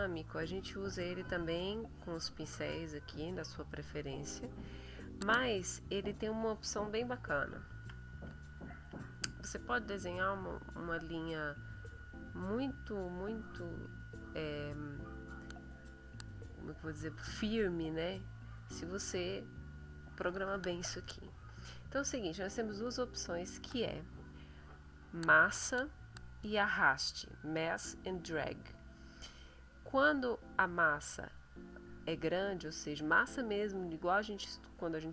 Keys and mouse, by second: 0.4 middle click, 1.7 click, 4.8 middle click, 5.5 click, 5.7 middle click, 7.2 ctrl+middle click, 7.5-9.0 ctrl+drag, 9.3 click, 10.3 click, 11.7 click, 12.4 click, 13.5 click.